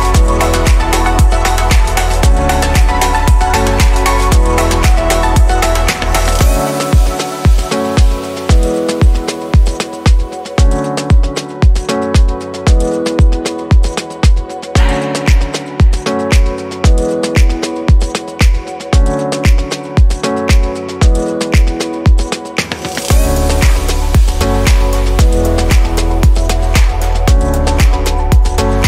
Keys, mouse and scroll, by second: 4.2-7.3 drag, 22.3-26.7 middle drag, 26.7 q.